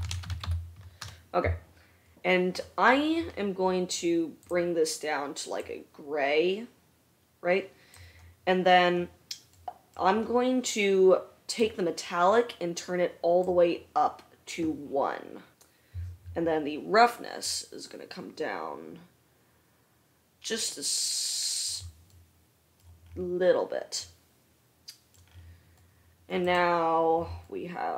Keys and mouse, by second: 0.1 BackSpace, 4.7-11.7 drag, 22.6-26.8 middle drag, 26.8-27.9 right drag.